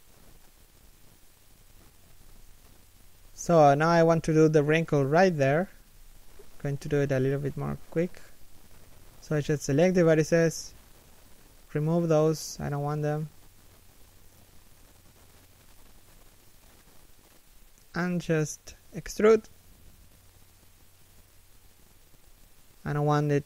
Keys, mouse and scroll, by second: 0.0 g, 0.7 alt+shift+middle click, 1.2 g, 1.6 a, 5.5 Tab, 6.1 alt+right click, 6.6 alt+shift+right click, 8.0 middle click, 8.9 3, 9.5 1, 10.5 alt+shift+middle click, 11.1 b, 16.2 alt+shift+middle click, 16.5 alt+shift+scroll down 1, 16.6-17.3 scroll up 1, 17.3 3, 17.7 KP_1, 18.3 alt+shift+middle click, 20.3 e.